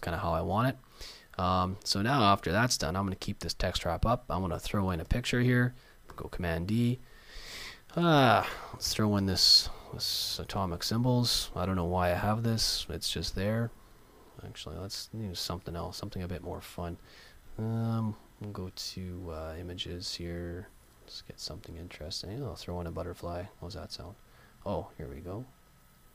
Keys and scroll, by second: 6.1 super+d.